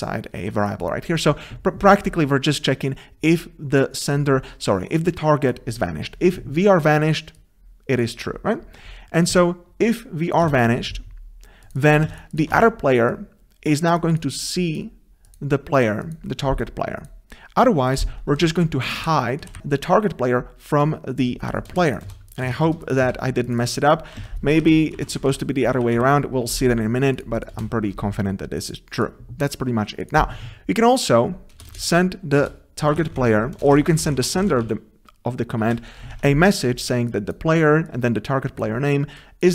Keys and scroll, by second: 1.1 ctrl+c, 10.5 ctrl+v, 11.8 ctrl+v, 19.0 ctrl+BackSpace, 19.4 Delete, 19.6 Escape, 24.2 ctrl+c, 25.9 ctrl+z, 27.8 ctrl+z, 33.6 ctrl+BackSpace, 35.6 ctrl+BackSpace, 36.1 Tab.